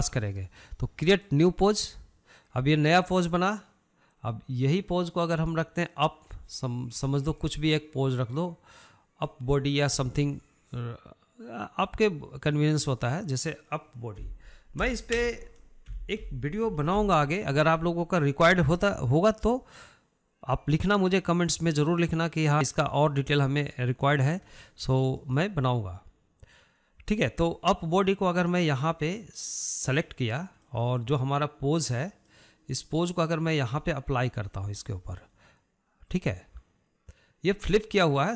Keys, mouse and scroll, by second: 2.4-5.5 drag, 8.5-17.3 drag, 22.6-25.0 drag, 25.0-25.3 scroll down 1, 25.3-29.5 shift+middle drag, 30.4 click, 31.6-35.8 middle drag, 35.8-38.3 drag.